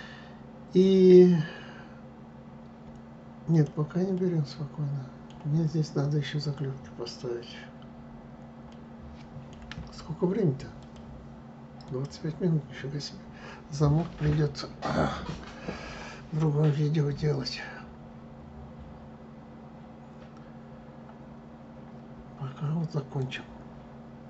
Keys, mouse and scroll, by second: 3.2 click, 3.8-6.9 middle drag, 8.4-11.4 middle drag.